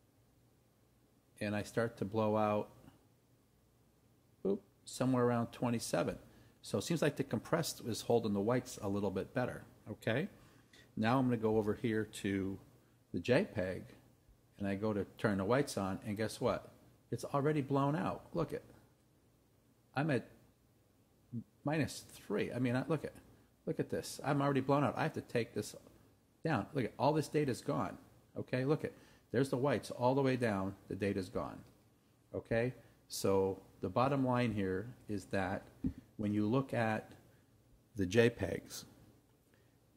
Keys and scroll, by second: 11.5 Right.